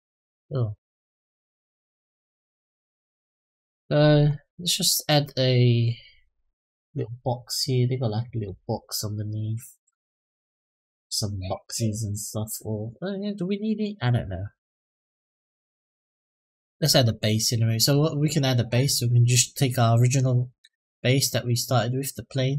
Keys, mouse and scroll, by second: 0.8 click, 3.8-4.4 scroll down 2, 4.2-6.1 middle drag, 16.5-17.4 drag, 17.6 click, 17.9 click, 20.4 shift+d, 21.7 click, 22.4 s.